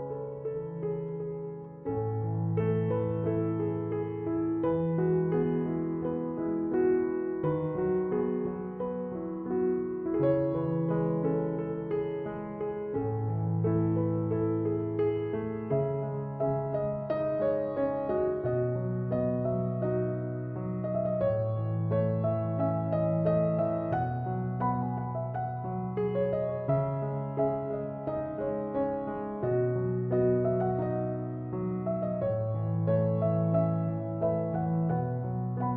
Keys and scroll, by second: 33.4 3, 33.7 Return.